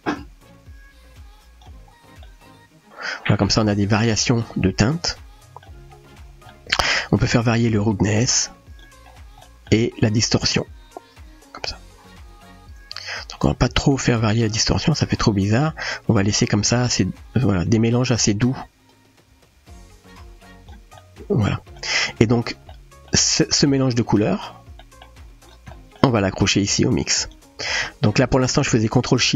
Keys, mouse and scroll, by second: 2.3-3.4 middle drag, 3.9-4.4 shift+middle drag, 4.9-5.6 middle drag, 6.5 middle click, 7.9 click, 9.4 middle drag, 10.6-16.3 drag, 16.9-18.1 middle drag, 18.9-20.7 drag, 21.0-21.8 middle drag, 22.8 middle click, 24.2 middle click, 24.9 middle click, 25.8 middle click, 26.8-27.3 drag, 28.0 middle click.